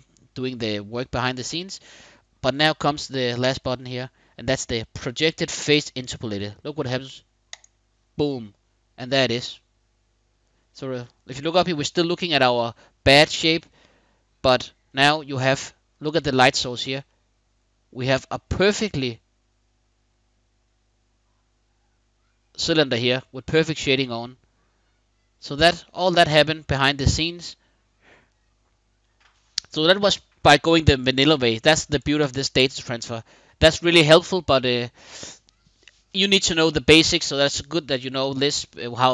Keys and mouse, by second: 3.2-7.4 drag, 9.0-10.3 middle drag, 13.3-14.3 middle drag, 14.6-15.7 middle drag, 16.7-25.2 middle drag, 25.6-26.8 middle drag, 27.0-28.7 middle drag, 31.5 middle click, 32.8 middle click, 33.9 middle click.